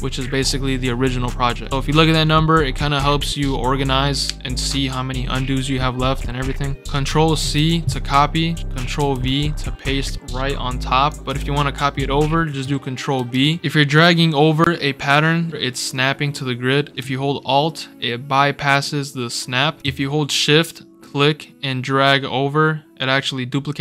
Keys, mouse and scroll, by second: 7.3 ctrl+c, 8.9 ctrl+v, 11.0 click, 13.1 ctrl+b, 13.9-19.8 drag, 21.0-23.8 shift+drag, 22.8 shift+scroll up 2, 23.7 shift+scroll down 2.